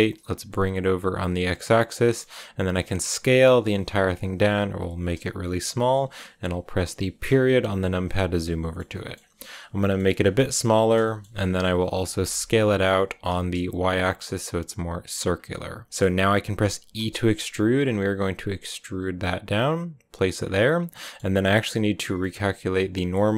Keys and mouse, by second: 0.1 click, 1.5 click, 1.8 click, 2.3 s, 4.5 click, 7.3 KP_Decimal, 8.0 middle click, 8.9 middle click, 9.7 middle click, 10.0 s, 10.5 click, 11.0 click, 12.0 s, 12.2 x, 14.6 y, 15.0 click, 15.4 click, 17.2 e, 20.2 click, 20.5 click, 22.1-23.3 drag.